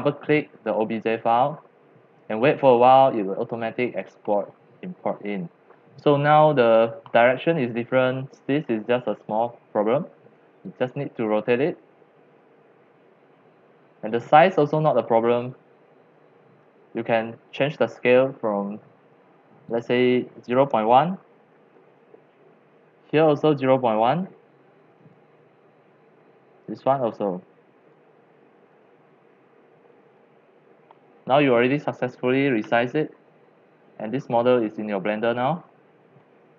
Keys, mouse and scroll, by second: 1.3 click, 1.5 click, 2.9 middle click, 2.9 scroll, 3.1 scroll, 3.1 scroll, 3.2 scroll, 3.3 scroll, 3.5 scroll, 3.7 scroll, 3.9 middle click, 3.9 scroll down 1, 4.0 scroll, 4.1 scroll down 1, 4.2 scroll down 1, 4.2-4.6 scroll, 4.6-6.2 middle drag, 6.2-8.7 drag, 8.7-9.4 middle drag, 9.5-11.4 drag, 12.0-14.8 drag, 15.5-16.7 middle drag, 15.5-15.9 scroll, 17.1-18.2 middle drag, 18.2-20.5 drag, 20.2-23.3 typing, 23.5 click, 24.9 click, 25.5-26.7 typing, 26.8 click, 27.8-28.9 drag, 28.9-30.0 typing, 30.2 Return, 30.7 middle click, 30.9-36.5 middle drag.